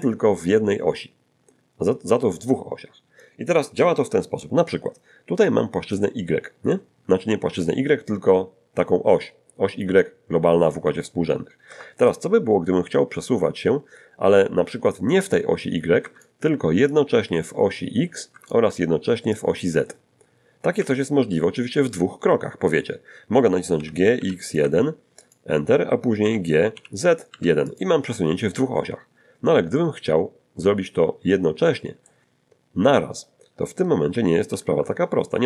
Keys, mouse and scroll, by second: 6.0-12.3 drag, 11.7 Escape, 15.3-16.4 drag, 16.0 Escape, 16.9-18.7 drag, 18.3 Escape, 19.4-21.2 drag, 20.8 Escape, 23.8 g, 24.2 x, 24.6 `, 24.6 1, 25.2 click, 26.2 g, 26.8 z, 27.3 1, 27.7 click, 29.8-32.3 drag, 34.5 alt+g.